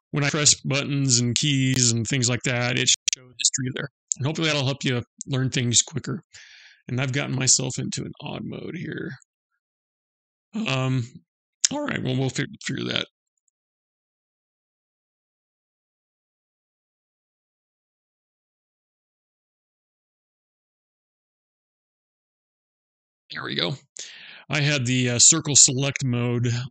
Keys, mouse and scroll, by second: 0.7 w, 1.2 right click, 4.1 Escape, 6.9 click, 8.9 click, 12.1 n, 18.4 click, 19.5 click.